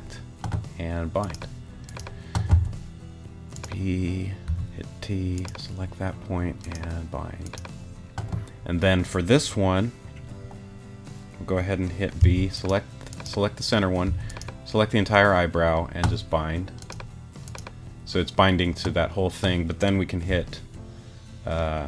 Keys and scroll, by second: 2.5 b, 4.5 t, 12.2 b, 14.0 t, 20.3 g.